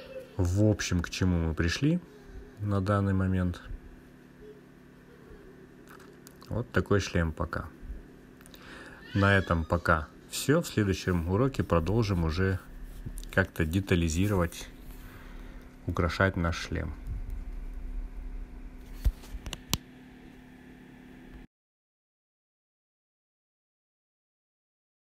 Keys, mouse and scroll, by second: 0.3 click, 3.6-7.0 drag, 8.2-8.8 scroll up 3, 8.8-10.0 drag, 10.9 click, 12.1 click, 13.4-19.4 drag, 20.3-21.5 drag, 22.3 click.